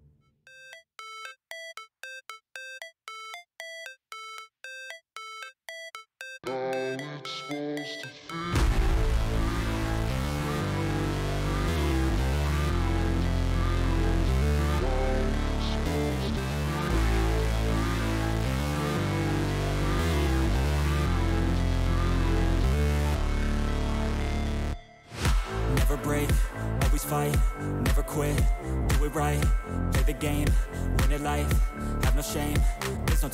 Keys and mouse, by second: 2.2 alt+click, 3.4-4.7 drag, 5.7 alt+click, 7.1-8.2 drag, 9.1 alt+click, 10.3-11.4 drag, 15.6-16.7 drag, 17.5 alt+click, 20.1-21.3 drag, 22.8 click, 23.8 click, 25.6 click, 26.4 click, 26.7 click, 27.8-28.9 drag, 30.5 click, 30.7 click, 31.4 click, 32.8 click.